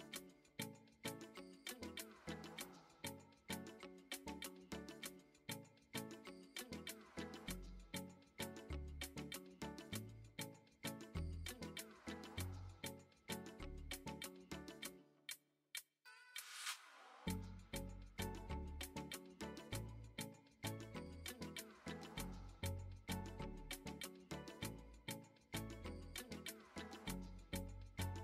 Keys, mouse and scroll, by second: 0.7 shift+middle drag, 1.7-4.9 drag, 5.5-5.8 shift+middle drag, 8.6-9.7 drag, 10.4-12.2 drag, 14.0-17.6 drag, 18.5 middle click, 19.3 KP_1, 20.8 KP_3, 21.8 shift+middle drag, 23.0-25.9 drag, 26.4 middle click, 27.4 shift+middle drag.